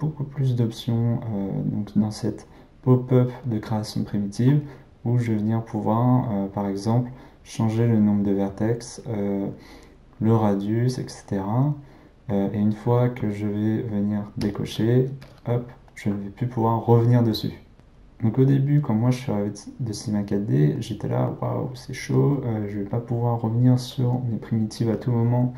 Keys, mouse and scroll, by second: 4.6-7.6 drag, 10.3-13.3 drag, 14.4 click, 15.2 click, 15.9-17.7 middle drag, 20.7-23.7 middle drag.